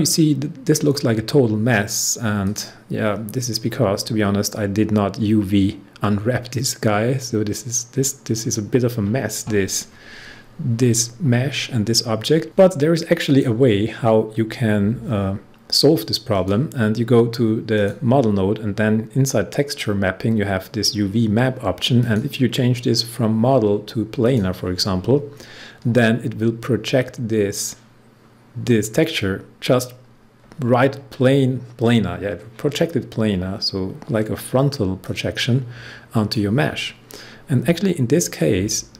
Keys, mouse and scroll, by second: 2.4 click, 7.0-7.6 scroll down 1, 7.6-9.4 scroll up 1, 12.4 click, 13.2 click, 16.3 click, 21.9 click, 22.1 click, 35.0-38.9 drag.